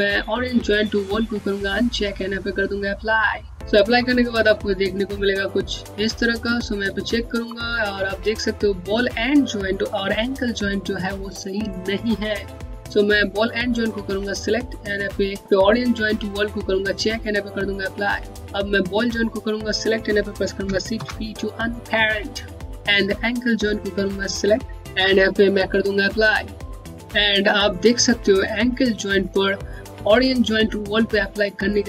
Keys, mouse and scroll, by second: 0.9 middle click, 5.8 alt+middle click, 5.9 scroll up 1, 6.8 alt+click, 12.7 click, 16.3 click, 18.2 alt+middle click, 18.3-18.7 alt+scroll down 2, 18.8 click, 20.6 shift+p, 22.8 p, 22.8 click, 25.7 click.